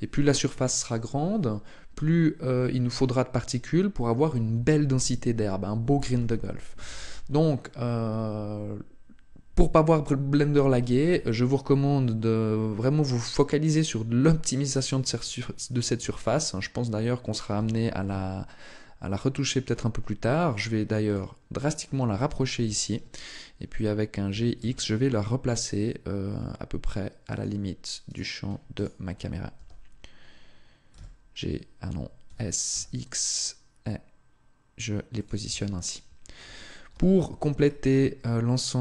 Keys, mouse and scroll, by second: 15.8 Tab, 17.3 g, 20.9 click, 22.0 KP_0, 24.1 s, 27.2 click, 27.9 right click, 28.5 shift+right click, 29.4 g, 35.1 click, 35.3 Tab, 36.7 n, 37.4 scroll down 1.